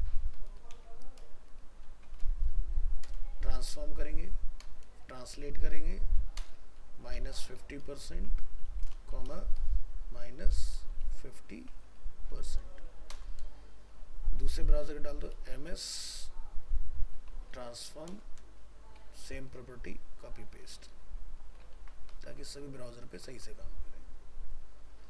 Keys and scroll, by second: 21.7 ctrl+c, 22.5 ctrl+v.